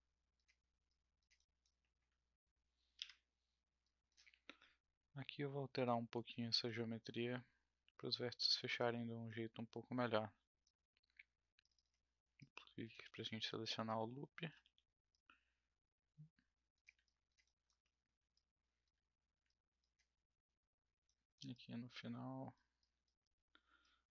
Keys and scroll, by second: 3.0 Delete, 13.0 w, 14.6 r, 20.2 f.